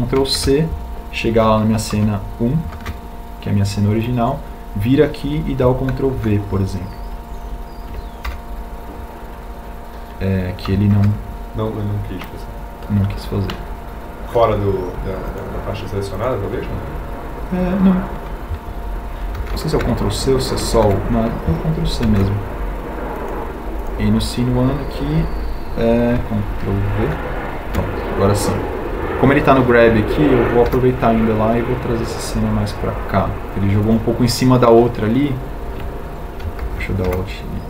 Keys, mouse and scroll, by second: 0.5 a, 2.5 ctrl+c, 7.1 ctrl+v, 22.9 ctrl+c, 29.9 ctrl+v, 33.8 g.